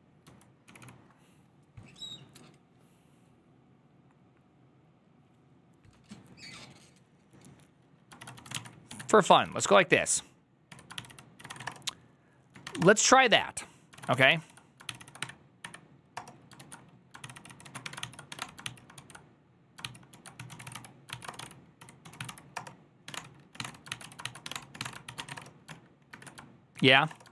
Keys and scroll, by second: 0.0-1.2 typing, 8.5-10.0 typing, 10.6 Tab, 10.8 ctrl+c, 11.1-12.6 typing, 12.7 Return, 13.8 ctrl+a, 14.0 2, 14.1 ctrl+c, 14.3 ctrl+c, 14.9 ctrl+c, 15.1 Up, 15.5 Up, 16.0 Return, 16.5 ctrl+a, 17.1 ctrl+c, 17.2 ctrl+c, 17.4-18.7 typing, 18.8 ctrl+p, 19.7 ctrl+c, 20.0-27.3 typing.